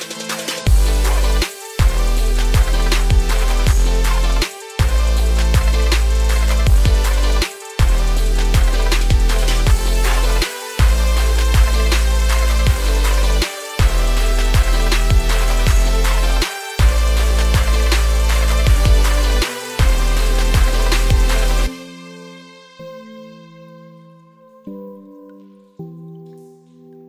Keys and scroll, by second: 13.2 ctrl+space.